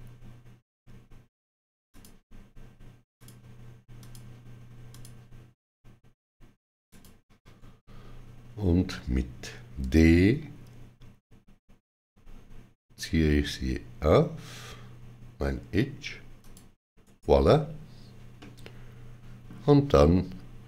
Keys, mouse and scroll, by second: 8.9 shift+click, 9.7 d, 12.2 shift+click, 12.2 shift+d, 16.3 shift+click, 16.9 right click, 18.2 middle click.